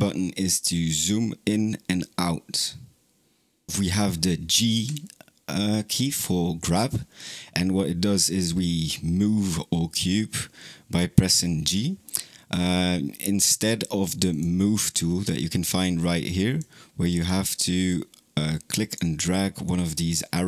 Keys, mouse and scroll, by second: 4.6 g, 14.1-16.5 drag, 17.7 click, 19.5 click.